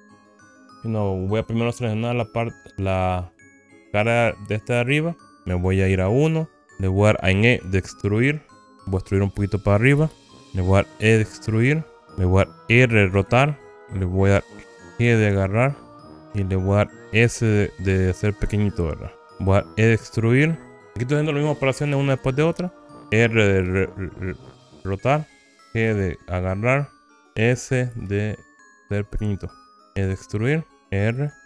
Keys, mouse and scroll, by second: 0.2 click, 1.4-3.4 drag, 4.0 middle click, 4.7 click, 6.6 KP_1, 6.7 shift+middle click, 8.6 e, 10.1 z, 10.3 click, 10.3 z, 11.2 e, 12.2 click, 13.3 r, 13.9 click, 15.1 g, 16.8 click, 17.6 s, 19.3 click, 20.0 e, 22.8 click, 23.6 r, 25.4 click, 25.9 g, 27.0 click, 28.0 s, 29.7 click, 30.2 e, 30.8 click, 31.2 r.